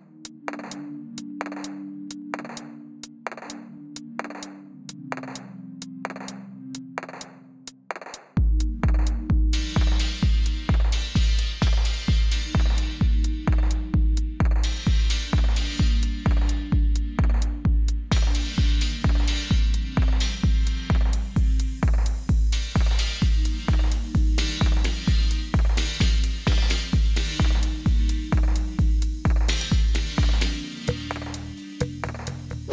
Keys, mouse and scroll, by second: 1.0 click, 1.7 click, 2.7 click, 3.1 click, 4.9 click, 5.3-6.7 scroll, 6.7-7.5 scroll, 7.5 s, 8.7 click, 13.3 click, 20.6 click, 20.9 click, 22.7 click, 23.4 click, 24.7 click, 28.2 click, 30.9 click, 31.4 click, 32.5 click.